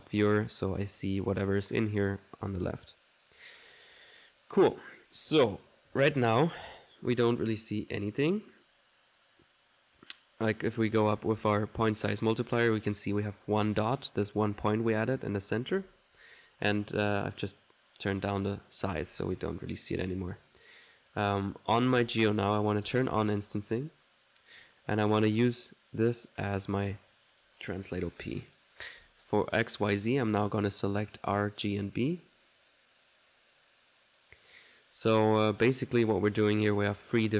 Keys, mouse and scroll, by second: 0.6 click, 6.5 click, 8.3 click, 9.4 click, 9.8 click, 10.9-12.4 drag, 14.0 middle click, 14.5 click, 15.1 middle click, 15.4 click, 15.8 ctrl+z, 17.1 ctrl+click, 18.1 click, 22.0 click, 22.9 click, 24.0 click, 25.4-28.0 drag, 30.9 click, 31.3 click, 31.7-34.7 drag, 35.5-36.6 middle drag, 36.7 middle click.